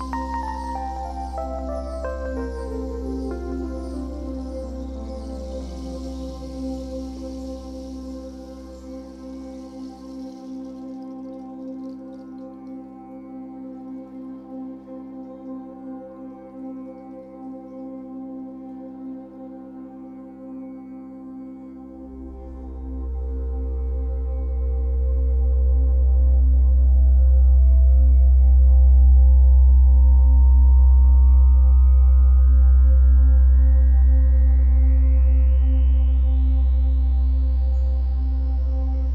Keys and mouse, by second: 3.2-4.3 middle drag, 4.3 click, 6.4 click, 7.6-9.7 drag, 10.8 click, 11.7 0, 12.0 Return, 12.8 i, 14.2-16.9 drag, 17.8 alt+shift+click, 18.2 alt+shift+click, 18.9 alt+shift+click, 20.1-23.5 alt+shift+drag, 23.5 Right, 24.8-26.9 drag, 26.9 i, 28.1-29.5 drag, 29.5 Right, 29.6 Right, 29.9 Right, 30.3 Right, 32.2 i, 34.0 click, 35.4 click, 36.5 click, 37.5-38.9 typing, 37.8 Return.